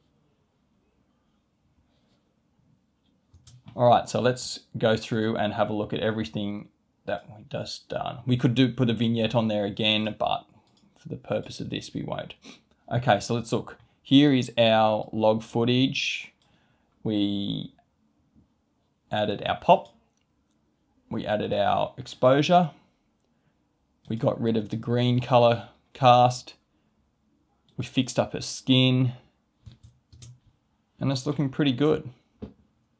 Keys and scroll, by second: 3.4 space, 30.1 space.